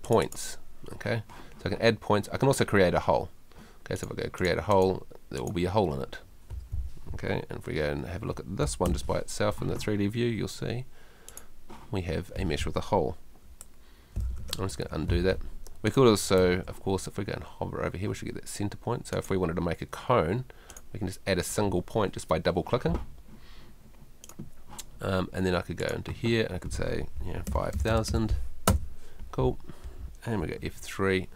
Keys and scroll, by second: 8.9 F4, 13.5 F2, 16.4 Escape, 27.5 5, 30.6 F3.